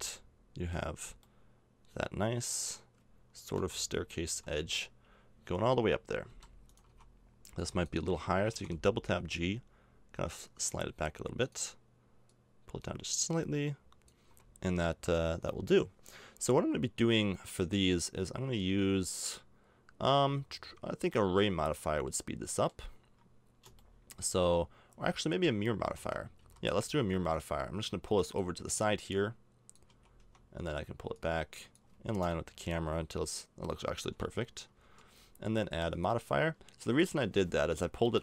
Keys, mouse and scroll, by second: 1.9 middle click, 3.5 KP_0, 4.2 z, 5.5 Tab, 6.3 b, 6.9 a, 7.5 b, 8.5 g, 14.2 a, 14.6 Tab, 19.9-25.9 middle drag, 25.9 Tab, 26.4 a, 30.2 Tab, 30.2 a, 32.2 KP_0, 34.1 KP_0, 34.8 z.